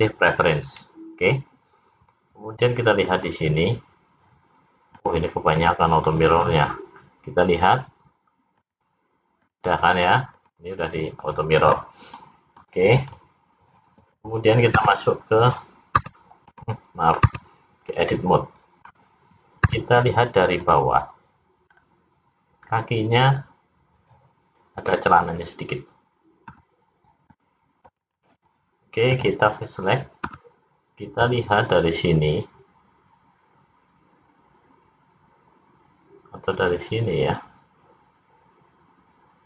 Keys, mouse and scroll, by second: 3.0 click, 4.9 click, 5.6 click, 8.5 click, 9.5 click, 9.9 click, 10.3 click, 11.5 click, 12.1 middle click, 12.9 click, 14.8 `, 17.3 Tab, 17.9 middle click, 21.7-22.7 scroll up 2, 26.4 c, 29.1 click, 30.2 c.